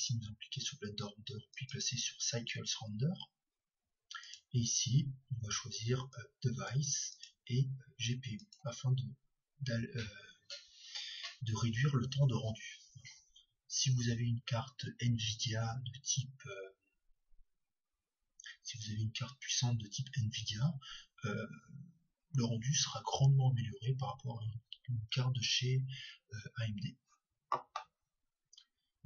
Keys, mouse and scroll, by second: 0.0-1.8 drag, 4.2-9.1 drag.